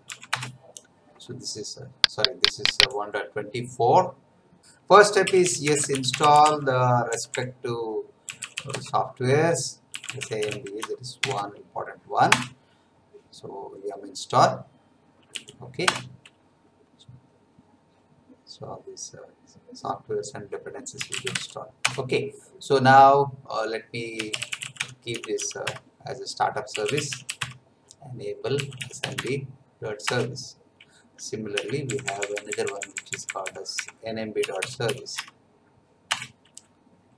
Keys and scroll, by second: 0.3 Return, 4.9-11.2 typing, 12.2 Return, 15.3 y, 15.8 Return, 20.7-21.8 typing, 23.9-29.5 typing, 30.0 Return, 31.5 Up, 31.8 BackSpace, 34.1-35.3 typing, 36.1 Return.